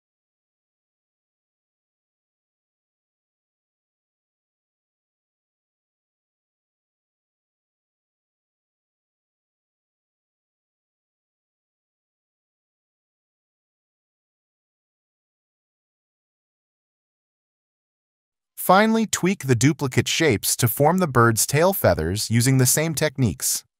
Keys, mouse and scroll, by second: 0.6 alt+shift+click, 8.7 alt+scroll, 9.4 ctrl+z, 10.7 alt+click, 10.8 alt+click, 11.1 ctrl+z, 11.3 alt+click, 12.1 alt+click, 12.5 alt+click, 12.8 alt+click, 14.1 alt+click, 14.7 alt+click, 15.7 ctrl+z, 16.0 alt+click, 18.0 ctrl+z, 18.5 scroll, 20.4 ctrl+0, 20.8 ctrl+z, 20.8 alt+click, 22.8 alt+click.